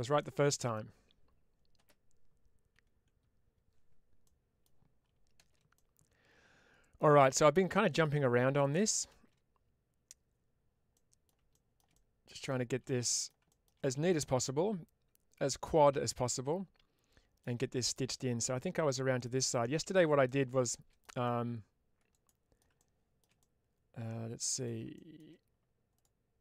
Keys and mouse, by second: 0.1-0.6 middle drag, 1.8 space, 4.1 middle click, 5.3 shift+space, 5.6-6.9 middle drag, 7.6 middle drag, 9.0 shift+space, 10.8-11.1 middle drag, 11.6 shift+middle drag, 11.8-12.1 middle drag, 12.4 shift+middle drag, 12.7-13.1 middle drag, 13.7-17.3 middle drag, 18.0-19.1 middle drag, 19.7 middle click, 20.1-20.5 shift+middle drag, 20.6 shift+middle drag, 21.1-22.5 middle drag, 23.3-24.5 middle drag, 24.8 shift+middle drag, 25.9 click.